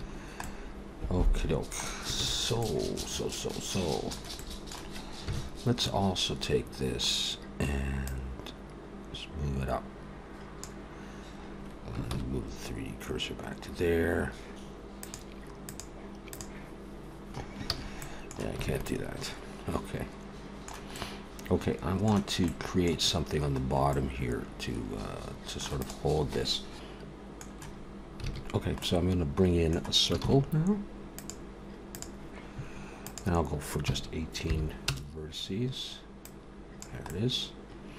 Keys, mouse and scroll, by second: 0.1-0.7 scroll down 3, 0.4 middle click, 2.2 ctrl+s, 2.6 middle click, 4.4 middle click, 5.3 KP_1, 5.8 a, 6.8-7.4 scroll up 1, 8.1 click, 12.1 shift+c, 13.2-13.9 scroll up 1, 15.0 click, 17.7 ctrl+z, 18.0 middle click, 18.7 alt+a, 18.8 middle click, 20.9 middle click, 22.8 middle click, 23.6-24.4 scroll up 2, 23.9 middle click, 25.7 click, 27.3 middle click, 28.0 alt+a, 28.3 scroll down 3, 28.6 scroll up 1, 28.6 middle click, 30.0 shift+a, 32.9 click, 36.1 click, 36.9 middle click.